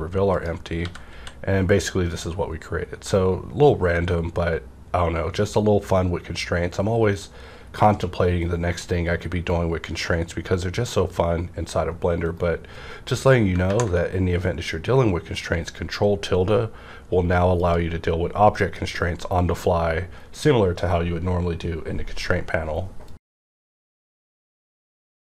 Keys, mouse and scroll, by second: 0.3 click, 0.7-1.1 typing, 12.2 right click, 12.2 typing, 13.6 ctrl+`, 17.6 ctrl+`, 17.6 click, 18.5 click.